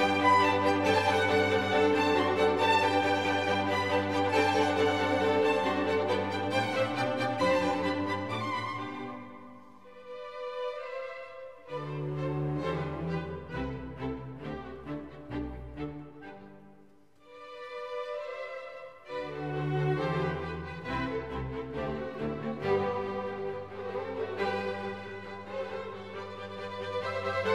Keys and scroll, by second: 1.0 super+o, 1.3 super+o, 23.5 BackSpace.